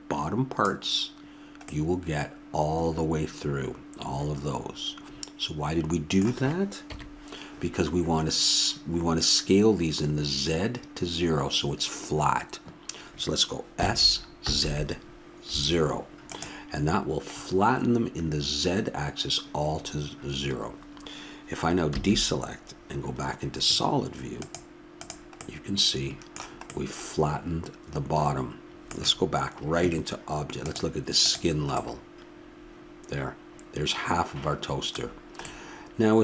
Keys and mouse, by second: 6.8 KP_1, 13.8 s, 21.9 a, 24.4-26.1 drag, 25.4 middle click, 30.6-32.3 drag, 32.2-36.2 middle drag.